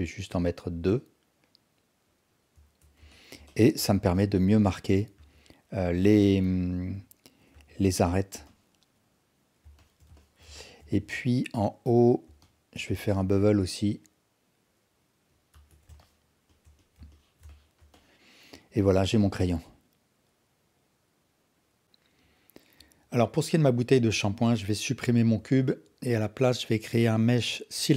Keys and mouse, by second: 2.6 Tab, 3.1 alt+drag, 3.5-3.8 alt+shift+drag, 4.1 alt+click, 5.2 Tab, 6.2-6.9 alt+drag, 7.5 Tab, 8.5-9.6 alt+drag, 9.8 alt+shift+drag, 10.2 ctrl+alt+drag, 10.6 alt+shift+drag, 10.9 Tab, 12.4 alt+click, 13.2 ctrl+b, 15.5 Tab, 16.0 alt+shift+drag, 16.5 alt+shift+click, 16.8 alt+click, 17.1 ctrl+alt+drag, 17.5-17.8 alt+shift+drag, 17.9-21.8 alt+drag, 24.0 x, 25.4 shift+a.